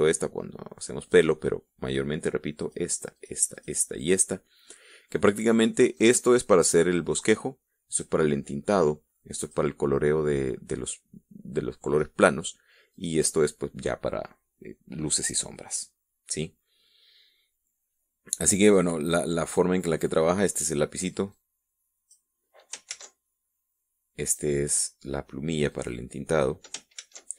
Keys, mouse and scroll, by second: 1.4 click, 3.0 click, 3.5 click, 3.9 click, 4.3 click, 6.4 click, 8.3 click, 9.8 click, 13.3 click, 19.0 click, 21.7-22.7 drag, 23.3 ctrl+z, 24.7 click, 26.1 click.